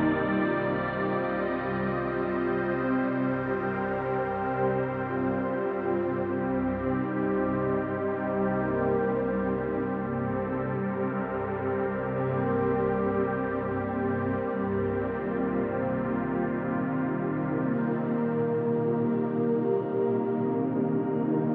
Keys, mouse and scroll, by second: 4.1-6.1 typing, 6.1 ctrl+alt+click, 9.8 click, 10.0 click, 14.2 click.